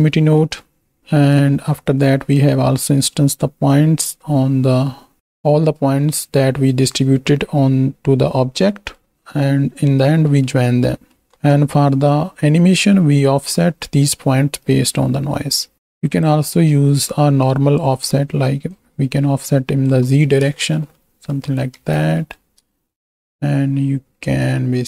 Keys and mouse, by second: 0.3 click, 1.3-2.4 right drag, 2.9 click, 5.2 click, 8.8 click, 9.1 right click, 10.4 click, 11.0 click, 11.5-13.0 drag, 14.7-15.7 drag, 16.7-17.9 drag, 18.7-20.0 shift+drag, 21.1-22.1 middle drag, 22.1 z, 22.8 shift+middle click.